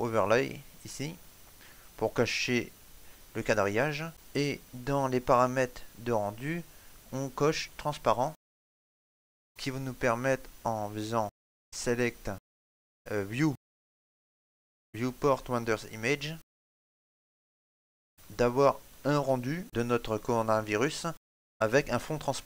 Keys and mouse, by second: 0.7 click, 2.2 middle click, 3.7 ctrl+middle click, 4.1 middle click, 8.0 click, 12.8 click, 13.0 click.